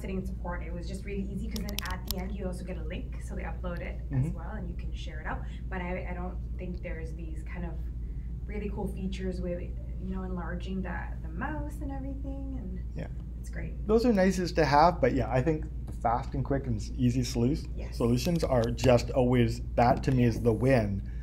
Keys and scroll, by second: 18.8 super+Tab.